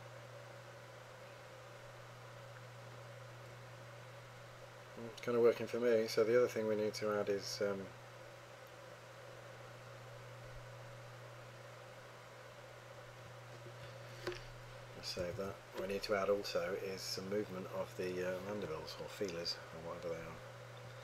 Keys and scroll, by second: 15.4 super+s.